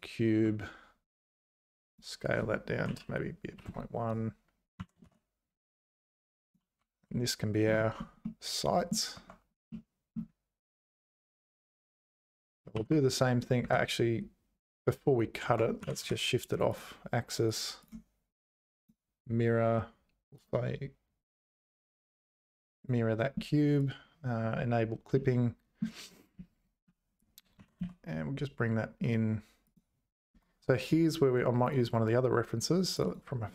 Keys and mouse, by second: 1.9-4.2 drag, 4.8 g, 7.1 `, 8.4 click, 8.5 middle click, 9.2 Tab, 9.7 middle click, 12.8 ctrl+r, 15.0 Tab, 15.5 Tab, 15.8 g, 18.0 click, 25.1 middle click, 26.4 z, 27.6 g, 30.4 Tab.